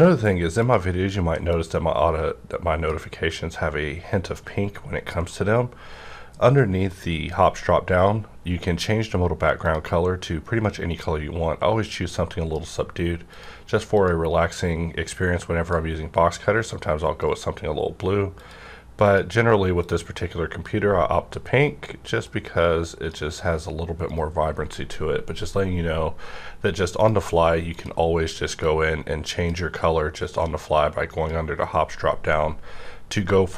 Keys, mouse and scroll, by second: 0.5 click, 0.6 right click, 1.4-6.8 drag, 5.2 right click, 9.5 click, 9.6-18.4 drag, 17.1 right click, 18.9-26.6 drag, 24.1 right click, 27.0 click, 27.0 right click, 27.6-33.5 drag, 33.1 right click.